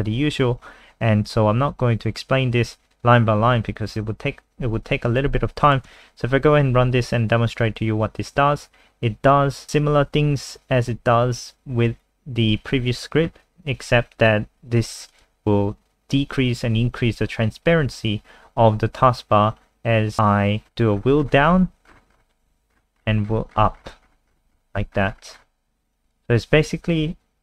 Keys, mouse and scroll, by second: 1.7 scroll down 1, 5.6 click, 5.9 F5, 15.1 click, 20.6-22.7 scroll down 26, 22.7-25.6 scroll up 33, 26.0 click.